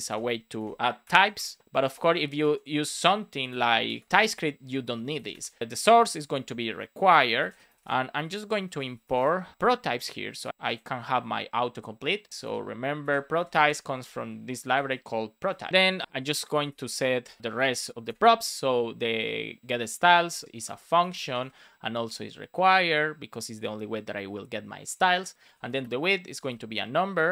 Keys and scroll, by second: 0.0-1.7 typing, 1.3 Return, 3.8 BackSpace, 4.0 shift+t, 7.3 shift+r, 8.0 Delete, 10.5 super+c, 11.1 super+Down, 12.4 space, 12.9 super+v, 13.2 space, 15.4 Return, 15.6 super+s, 16.0 Return, 17.4 shift+s, 17.5 Return, 17.9 shift+;, 18.0 space, 20.0 shift+p, 20.6 Return, 22.6 Return, 25.8 Return, 27.0 Return.